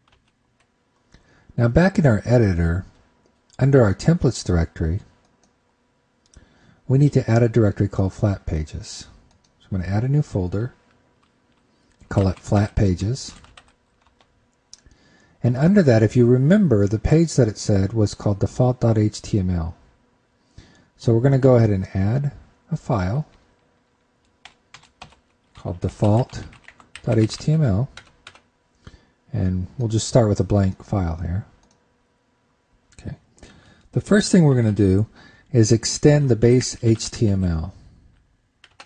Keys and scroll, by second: 0.0 super+Tab, 0.8 super+Tab, 25.2 super+Right, 25.3 shift+super+Left.